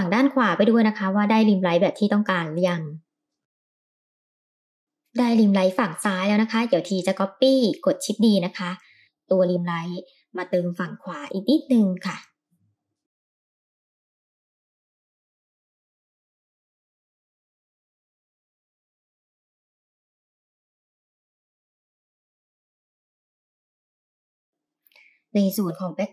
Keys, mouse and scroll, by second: 4.4 g, 5.0 shift+d, 7.5 r, 10.7 g, 14.5 middle click, 14.8 middle click, 14.9 g, 15.8 click, 16.0 KP_0, 16.6 middle click, 16.7 scroll down 2, 17.0 click, 17.2 d, 17.5 right click, 17.6 click, 17.7 middle click, 18.0 middle drag, 18.5 s, 19.7 click, 20.0-23.0 typing, 21.6 middle click, 21.8 click, 21.9 middle click, 22.8 click, 23.6 middle click, 23.7 scroll down 2, 23.8 middle click, 24.2 middle click.